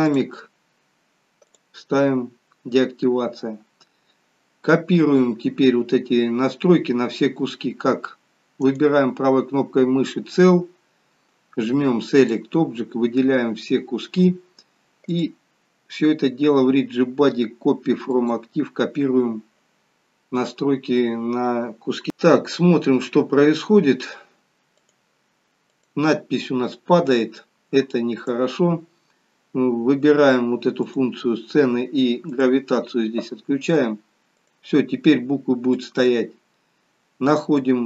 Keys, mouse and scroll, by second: 0.0 click, 0.4-1.4 scroll down 3, 1.5 click, 8.6 right click, 15.1 click, 24.8 click, 25.9 click, 28.2 click, 30.9 click, 32.3 click, 34.4 click, 35.7 click, 37.6 click.